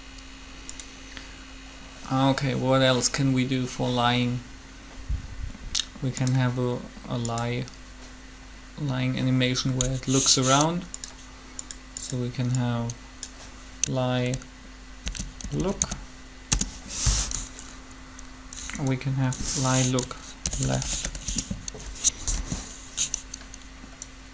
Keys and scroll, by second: 14.9-15.6 typing, 16.2 Return, 20.2-20.9 typing, 21.1 Return, 22.3 7.